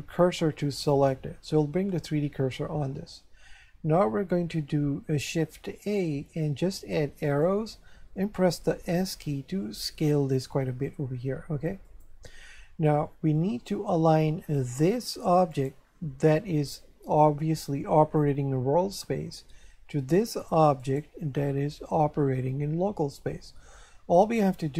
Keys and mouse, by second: 0.9 click, 5.5 shift+a, 7.3 click, 9.1 s, 11.9 click, 13.3 shift+middle click, 15.5 right click, 20.8 right click.